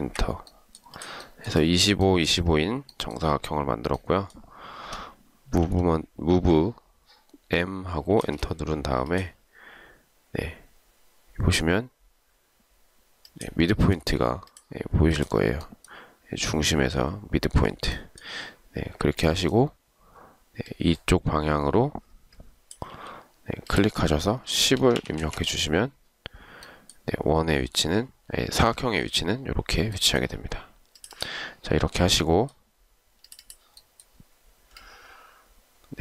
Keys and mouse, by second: 0.2 Return, 5.8 m, 8.4 space, 23.1 ctrl+z, 24.7-25.5 typing.